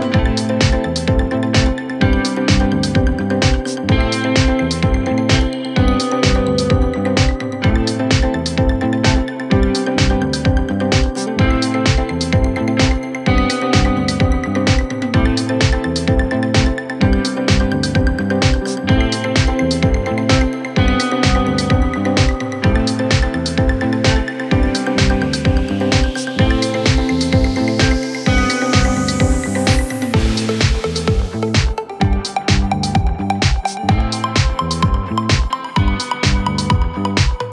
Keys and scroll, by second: 9.0 shift+Page_Up.